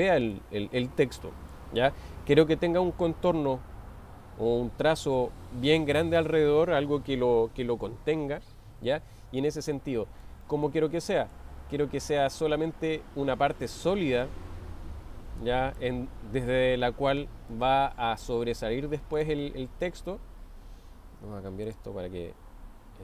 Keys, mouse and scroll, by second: 0.3-2.0 middle drag, 10.2-11.4 middle drag, 12.3 click, 14.2-15.8 drag, 18.0-19.0 middle drag, 21.8-23.0 drag.